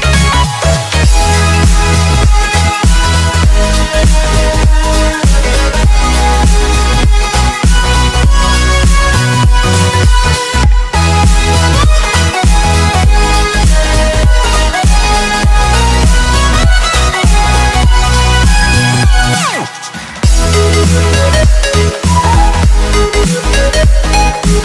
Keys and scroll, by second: 3.0 ctrl+z, 5.7 ctrl+z, 8.3 z, 9.5 ctrl+0, 11.6 z, 13.3 x, 14.0 ctrl+z, 14.1 x, 15.1 ctrl+z, 21.0 ctrl+z, 22.5 ctrl+z, 23.0 x.